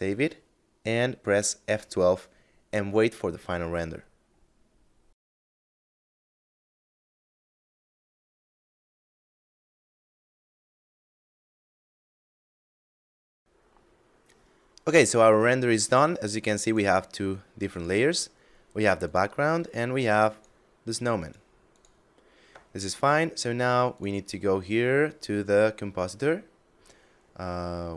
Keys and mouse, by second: 1.1 F12, 3.8 middle click, 16.1 click, 23.4 click.